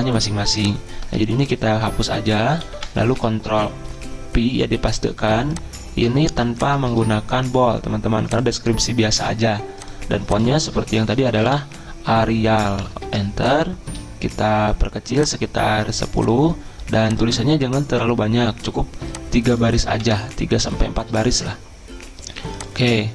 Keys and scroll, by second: 1.2 ctrl+a, 2.8 Delete, 3.1 ctrl+v, 6.9 ctrl+a, 10.5-12.1 typing, 13.1 Return, 20.0 Delete.